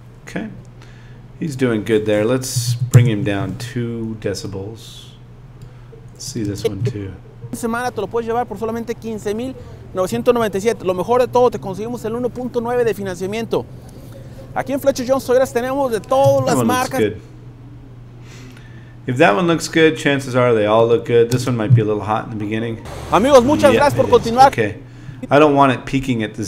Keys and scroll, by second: 2.5 space, 6.4 space, 16.2 space, 21.3 space.